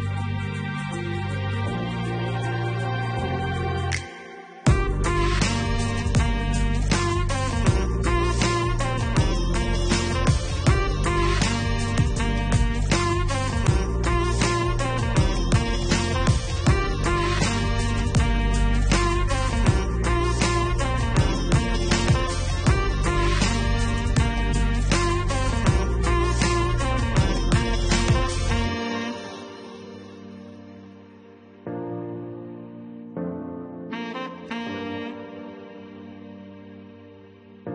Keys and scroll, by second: 7.9 4.